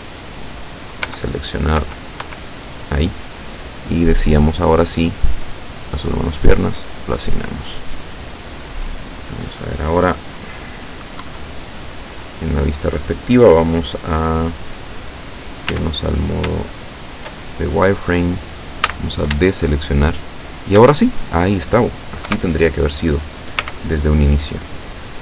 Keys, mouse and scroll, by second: 0.0 right click, 1.1 l, 1.8 l, 6.4 click, 7.2 scroll down 1, 8.0-8.4 scroll up 1, 11.3 KP_7, 15.7 z, 16.7 shift+middle click, 17.7 shift+scroll up 3, 18.9 a, 19.6-21.0 shift+drag, 22.3 KP_7, 23.7 z, 24.3-24.7 scroll down 2.